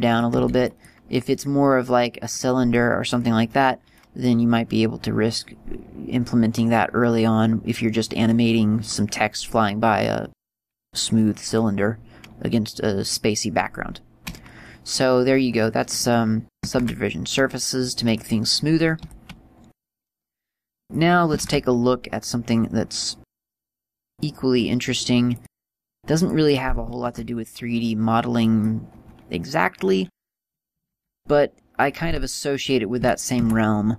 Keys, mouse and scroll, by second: 0.2 right click, 0.5 x, 1.7 scroll up 1, 2.2 scroll up 4, 2.4 middle click, 16.9 shift+a, 19.9 click, 21.1 click, 21.5 shift+a, 25.9 right click, 26.6 click, 27.1 shift+a, 32.4 click, 33.1 r.